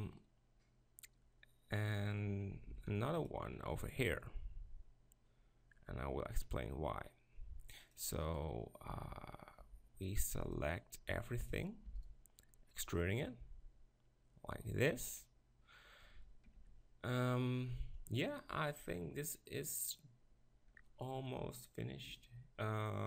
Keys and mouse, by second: 2.7 ctrl+r, 8.0 click, 9.7 b, 11.9 e, 12.1-13.1 drag, 13.2 click, 13.4 click, 16.4 ctrl+KP_Decimal.